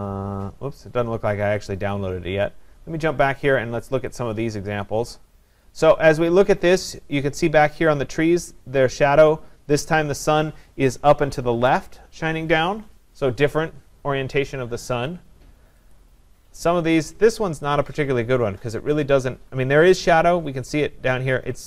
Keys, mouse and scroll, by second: 1.7 click, 3.6 click, 5.3 click, 16.0 click.